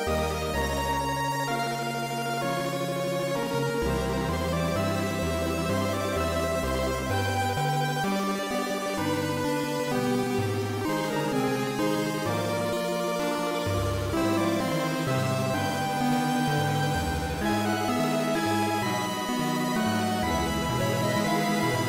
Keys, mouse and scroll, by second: 6.0 click, 11.0 KP_3, 12.9-13.7 scroll down 3, 13.7 scroll down 1, 14.5-14.9 scroll down 3, 15.5 shift+middle click, 15.5 scroll down 2, 16.5-17.1 scroll up 3, 18.7-20.1 scroll up 7, 20.6 g.